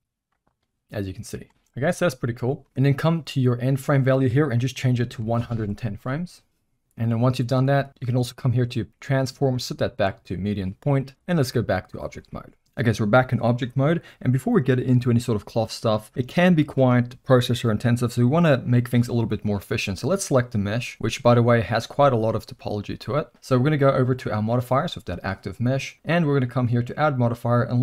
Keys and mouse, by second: 1.8 space, 2.4 middle click, 3.6-6.8 drag, 8.3-10.3 drag, 11.1-11.9 drag, 20.1 click, 21.0 z, 22.8 z, 24.3 click, 26.2-27.8 drag.